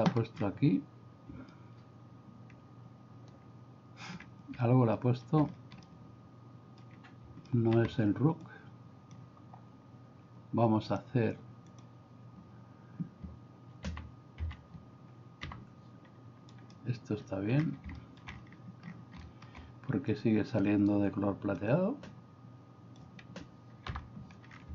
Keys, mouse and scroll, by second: 1.5-4.0 shift+middle drag, 5.0 middle click, 5.9-7.0 shift+middle drag, 7.5 middle click, 8.4 click, 10.9-11.9 drag, 14.5 a, 15.4 g, 18.0 middle click, 21.6-23.1 drag, 23.9 n.